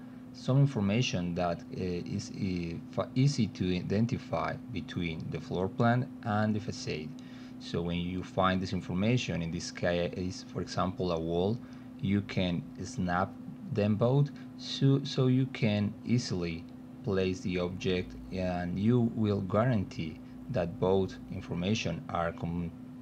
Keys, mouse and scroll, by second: 1.5 middle click, 2.7 middle click, 3.3 middle click, 3.8-5.4 alt+middle drag, 6.3 alt+middle click, 7.1 middle click, 8.7-12.8 drag, 13.5 alt+middle click, 14.3-15.5 alt+middle drag, 16.5 click, 17.6 middle click, 18.9 middle click, 20.1-21.8 drag, 22.2 alt+middle click.